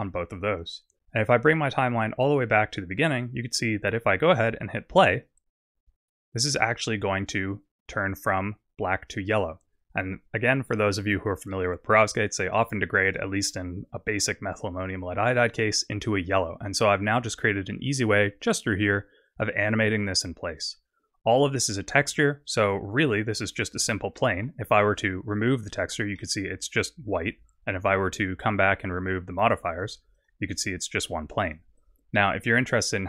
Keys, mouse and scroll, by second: 0.0 right click, 2.3 click, 4.0-4.3 scroll down 2, 5.1 click, 9.8 click, 11.5 middle click, 15.4-16.6 scroll down 5, 19.3 click, 24.2 middle click, 25.3 click, 26.1 middle click, 28.1 click, 29.7 click, 30.1 click, 31.4 click, 31.8 click, 32.1 middle click.